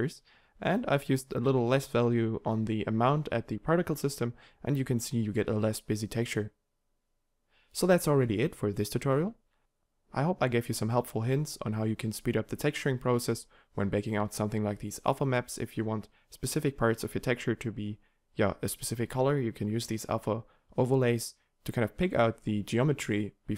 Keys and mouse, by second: 0.5 g, 9.6 g, 10.0 g, 21.6 n, 22.0 g.